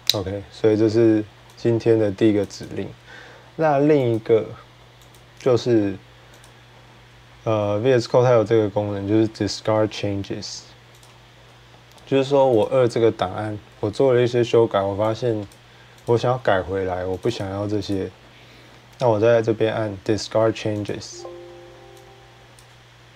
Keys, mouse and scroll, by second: 0.0-0.7 typing, 2.2 click, 2.4 click, 3.9 click, 4.9 click, 6.2 click, 10.8 click, 12.4 click, 15.3 click, 15.9 click, 17.0 click, 17.2 click, 17.7 click, 20.7 click, 22.4 click.